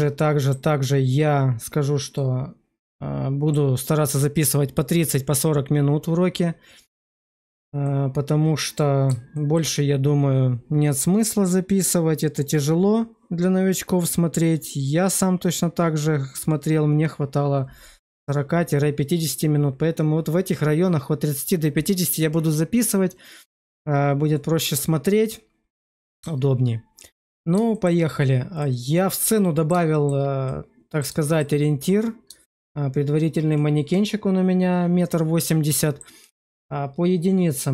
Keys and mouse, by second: 2.1-3.4 middle drag, 7.0 shift+middle click, 7.8-9.0 middle drag, 9.2 shift+middle drag, 22.7-25.7 middle drag, 26.0 shift+middle click, 27.1 shift+middle click, 27.6 shift+middle click, 28.5 click, 29.3 middle click, 29.8 shift+middle click, 30.4 middle click, 31.2 shift+middle click, 32.3 shift+middle click, 35.4 middle click.